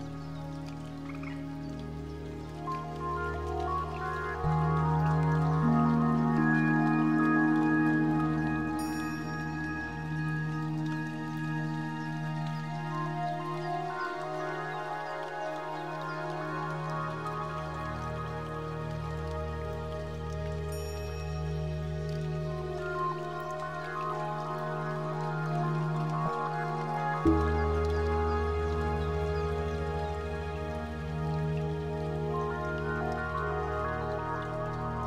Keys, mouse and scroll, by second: 1.5 Escape, 2.5 click, 3.8 middle click, 5.0 Tab, 5.5 scroll up 6, 5.9 shift+middle click, 6.3 middle click, 11.3 n, 12.8 middle click, 14.4 KP_1, 15.3 u, 18.1 scroll up 2, 18.8 shift+middle click, 19.1 scroll down 1, 20.0 Tab, 20.5 middle click, 21.8 Tab, 23.4 click, 25.7 s, 32.8 click, 33.6 Tab, 33.8 middle click.